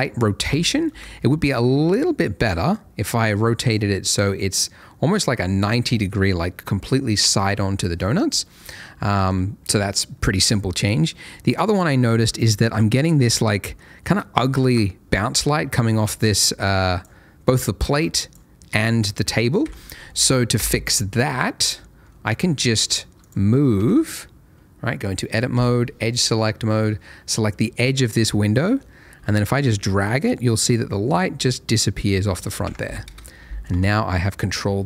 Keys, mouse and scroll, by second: 0.9 KP_0, 2.2 click, 9.1 shift+middle click, 10.9 middle click, 11.4 shift+middle click, 11.7 shift+middle click, 12.8 shift+scroll up 1, 15.8 click, 19.6 Escape, 20.5 KP_0, 21.4 middle click, 21.6 scroll down 1, 22.1 middle click, 22.5 shift+middle click, 23.2 click, 23.7 Tab, 25.5 2, 26.1 click, 26.6 scroll up 1, 28.4 middle click, 29.1 g, 29.4 middle click, 32.3 click, 32.6 Tab, 33.0 KP_0, 34.1 alt+a.